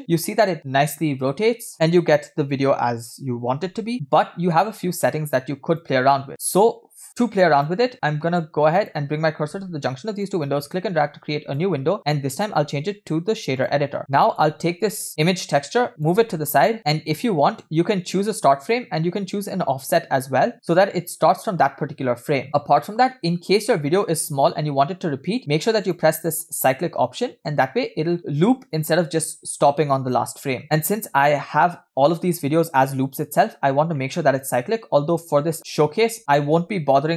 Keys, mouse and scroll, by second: 5.7-8.4 drag, 8.5-13.7 drag, 14.0 scroll up 4, 14.2 click, 14.5 drag, 14.8 click, 15.2 click, 16.3 middle click, 16.6-16.9 scroll up 4, 17.2 middle click, 17.6 scroll up 3, 20.8-22.5 drag, 26.1 click, 30.6 middle click, 30.6 scroll down 5, 33.6 scroll up 1, 33.9 middle click, 34.2 scroll up 2, 35.4 middle click, 36.1 shift+middle click.